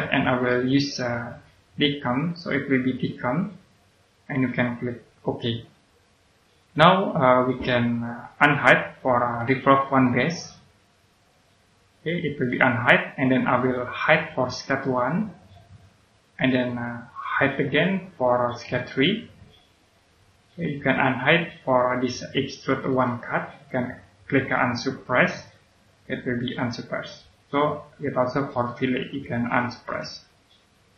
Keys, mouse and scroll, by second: 0.4 click, 5.2 click, 9.8 right click, 11.1 right click, 15.6 click, 18.6 right click, 20.7 click, 22.8 right click, 25.0 click, 28.4 right click, 29.8 click, 30.8-30.9 scroll down 1.